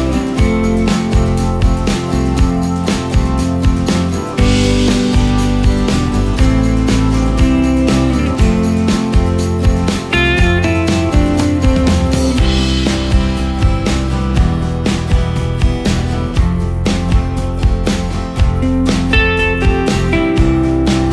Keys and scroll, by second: 2.6 ctrl+space, 6.3 ctrl+space, 7.6 space, 8.2 ctrl+space, 16.3 ctrl+space, 17.2 ctrl+alt+space, 19.3 ctrl+alt+shift+space, 19.8 d.